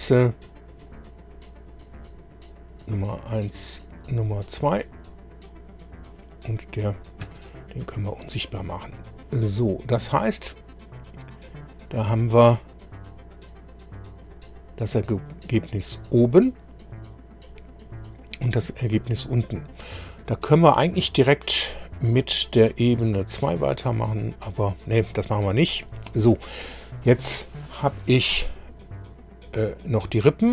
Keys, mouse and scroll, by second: 0.3 click, 1.7 click, 2.8 click, 3.9 click, 6.1 click, 7.2 space, 8.6 scroll down 2, 9.2 scroll down 2, 10.0 click, 12.7 click, 18.7 click, 28.8 click.